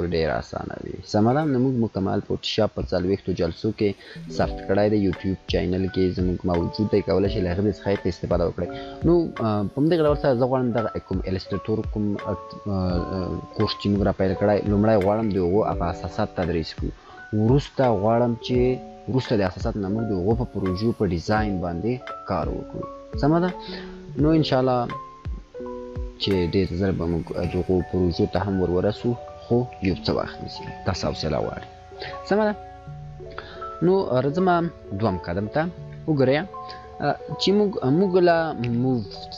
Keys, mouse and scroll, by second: 14.1-16.2 drag, 20.5-23.0 click.